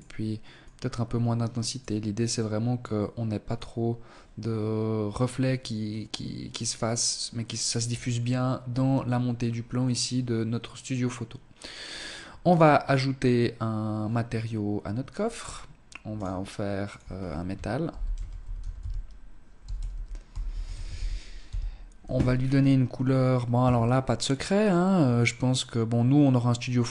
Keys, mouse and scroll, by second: 1.4 click, 11.5 right click, 14.2-14.6 scroll up 8, 15.2 click, 15.8 click, 21.3-22.2 scroll down 4.